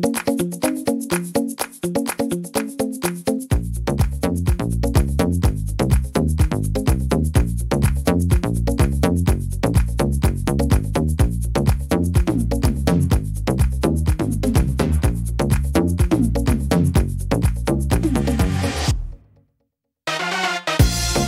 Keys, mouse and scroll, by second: 0.5 middle click, 2.5 click, 3.4 right click, 3.9 shift+right click, 4.3 middle click, 5.1 click, 6.6 middle click, 7.4 middle click, 8.9 middle click, 10.6 click, 11.1 shift+middle click, 12.0 click, 13.3 right click, 14.1 click, 15.4 middle click, 16.3 right click, 17.0 click, 18.9 click, 19.6 right click, 20.2 click.